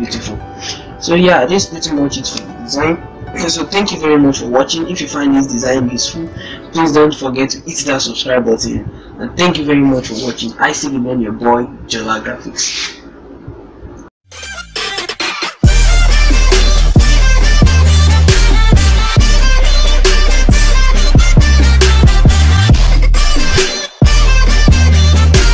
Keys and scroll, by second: 0.0 ctrl+-.